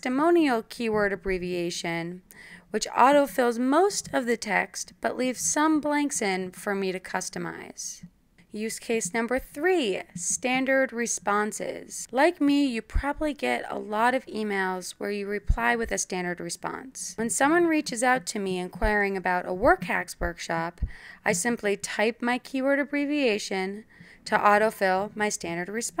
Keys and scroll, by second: 8.2-15.6 typing, 16.0 Return, 16.8 Tab, 18.2-20.6 typing, 22.4-23.5 typing, 24.7-26.0 typing.